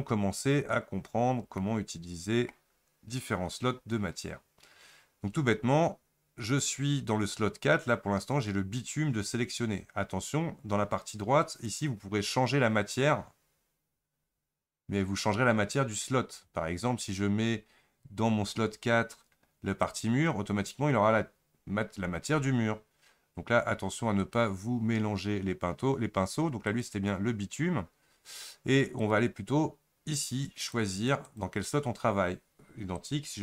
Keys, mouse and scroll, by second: 20.0 click, 26.4-33.4 drag.